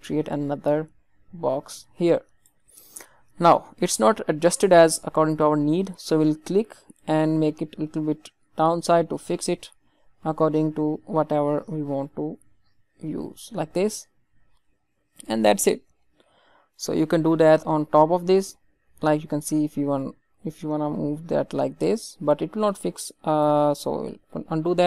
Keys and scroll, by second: 23.8 ctrl+z.